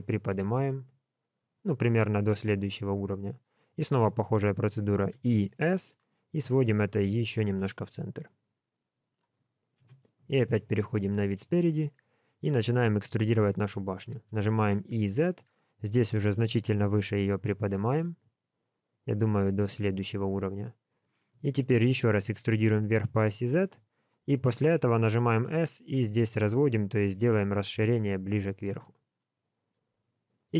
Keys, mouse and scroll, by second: 3.4 middle click, 5.1 e, 9.8 KP_1, 10.4-11.0 scroll down 2, 11.0 scroll down 1, 11.2 shift+middle click, 14.1 e, 20.5 scroll up 2, 21.6 e, 29.1 shift+middle click.